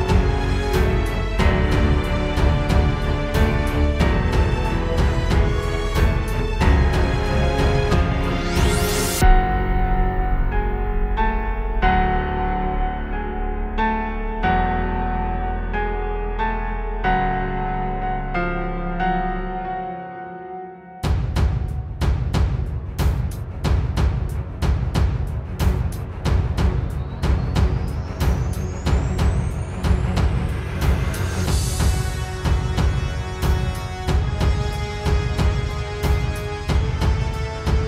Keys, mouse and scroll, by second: 1.8-2.3 scroll up 2, 2.2 middle click, 4.1 middle click, 8.7 right click, 10.4 click, 11.4-11.9 scroll down 1, 12.4 KP_0, 13.8-14.3 scroll up 3, 17.9-18.5 scroll up 2, 18.5 right click, 22.4 click, 25.7 click, 29.0 click, 32.6 click, 34.3 click, 34.6 click, 35.8-36.5 scroll down 3, 36.5-37.7 scroll up 1.